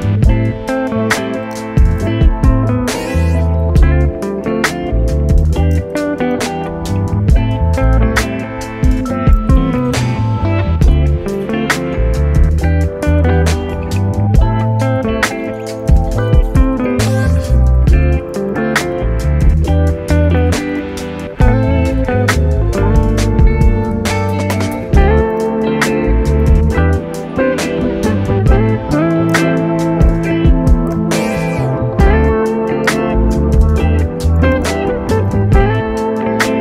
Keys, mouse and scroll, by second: 1.6 p, 2.5 scroll up 2, 2.9 Tab, 3.4 click, 3.9 click, 4.1 click, 4.4 Tab, 4.9 a, 5.8 i, 9.4 x, 11.8 middle click, 12.4 s, 13.9-15.0 middle drag, 15.0 a, 16.2-17.4 drag, 17.4 Tab, 17.7-19.6 middle drag, 19.6-20.5 scroll up 2, 20.5 scroll up 1, 20.6 Tab, 21.3 Tab, 21.9 Tab, 22.7 ctrl+r, 27.9-29.4 middle drag, 29.4 3, 29.8 click, 31.0 shift+d, 32.9 p, 33.9 Tab, 34.4 click, 34.8 right click, 35.0 Tab, 35.4 a, 35.8-36.6 middle drag.